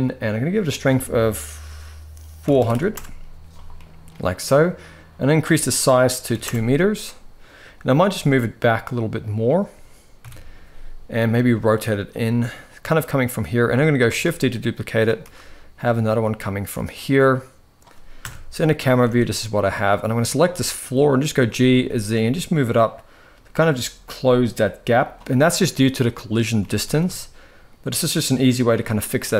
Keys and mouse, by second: 0.4-2.6 drag, 2.4 0, 3.4 middle click, 4.9-6.1 drag, 7.7 g, 9.9 KP_7, 10.8 r, 12.0 g, 13.7 shift+d, 14.9 r, 17.9 KP_0, 18.6 ctrl+s, 18.8 ctrl+s, 19.9 click, 20.2 shift+middle drag, 21.0 g, 26.3 g.